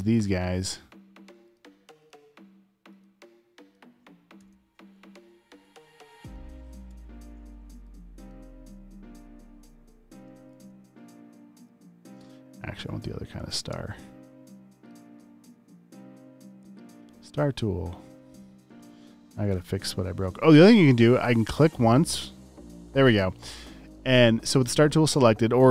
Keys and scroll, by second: 3.5-4.5 typing, 12.1-13.8 typing, 18.6 Down.